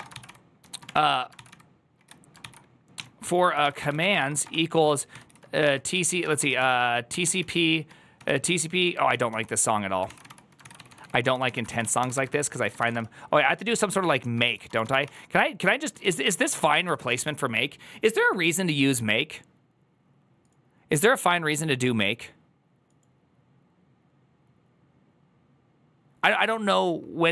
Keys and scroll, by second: 17.1 1.